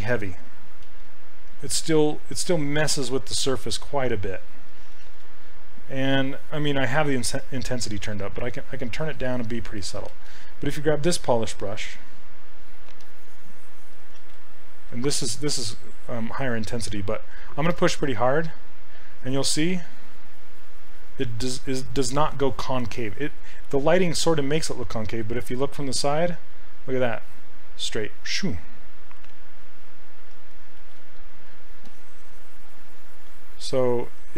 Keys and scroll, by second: 0.9 ctrl+z, 5.1 ctrl+z, 10.2 ctrl+z, 15.9 ctrl+z, 18.2 s, 30.8 ctrl+z.